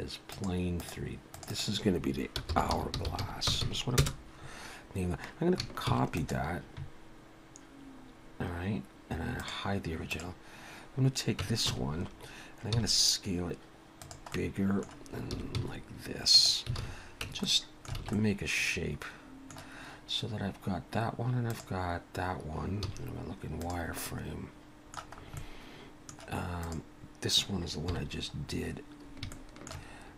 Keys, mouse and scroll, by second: 0.3 click, 0.8 click, 1.8 click, 3.6 s, 5.9 shift+d, 8.1-8.9 scroll down 1, 9.4 click, 10.1 click, 11.4 Tab, 11.6 a, 12.7 s, 14.3 middle click, 15.3 s, 16.8 alt+a, 17.3 Tab, 17.4 middle click, 18.0 alt+a, 18.1 middle click, 21.5 click, 22.8 z, 24.1 middle click, 25.2 scroll up 1, 25.4 middle click, 26.6 click, 27.9 KP_1, 28.5-29.2 scroll up 1, 29.2 scroll up 3, 29.3 shift+middle click.